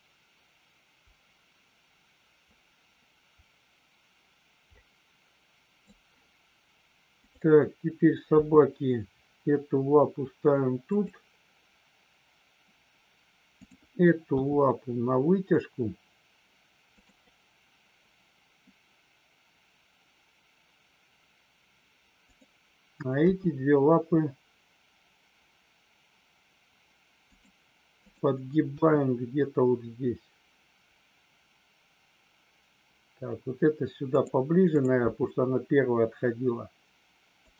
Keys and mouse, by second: 7.2 click, 10.8 click, 14.2 g, 16.8 click, 22.2 click, 27.2 click, 28.7 g, 34.7 click, 35.5 g, 37.3 click.